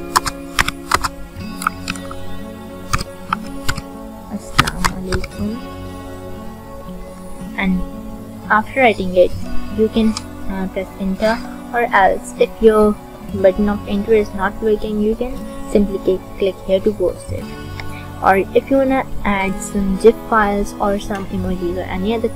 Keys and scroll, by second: 0.0-1.8 typing, 2.8-5.0 typing.